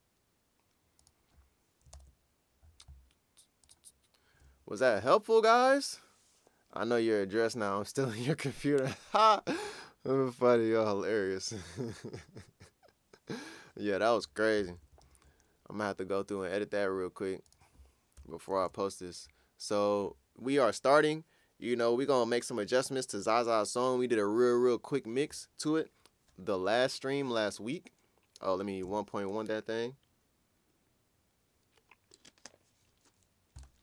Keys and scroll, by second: 1.9 super+o, 15.0 ctrl+super+s, 18.2 BackSpace, 18.6 1, 28.8 Return.